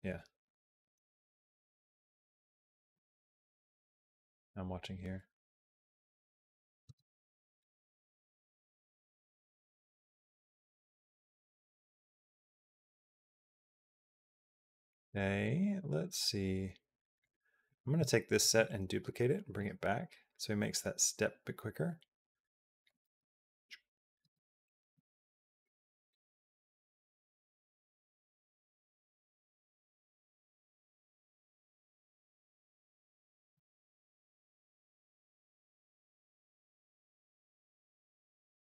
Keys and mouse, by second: 2.7 space, 6.8 space, 7.4-12.1 drag, 14.2 middle click, 15.3-17.1 drag, 17.5 click, 18.2 shift+d, 19.8-22.7 drag, 22.7 space, 24.1 space, 24.6 click, 24.6 space, 26.2 space, 27.5-31.5 drag, 31.8 g, 32.9 click, 33.4 space, 34.5 space, 34.7 click, 35.2 space, 35.5 click.